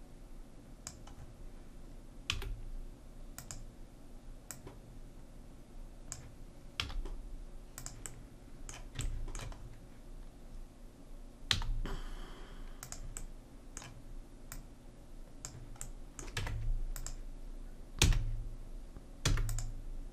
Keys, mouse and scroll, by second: 0.7 click, 1.2 right click, 2.3 s, 4.5-6.4 drag, 6.8 s, 11.5 z, 14.5 middle click, 14.7-15.9 drag, 15.9 middle click, 16.4 Tab, 18.0 f, 19.3 e.